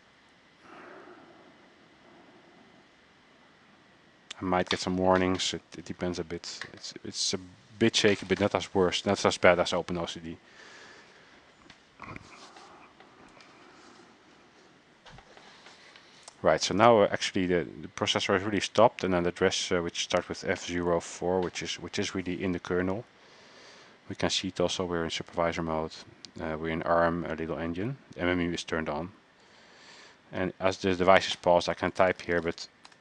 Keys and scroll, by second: 27.9 alt+Tab, 30.1 alt+Tab, 31.6-33.0 typing.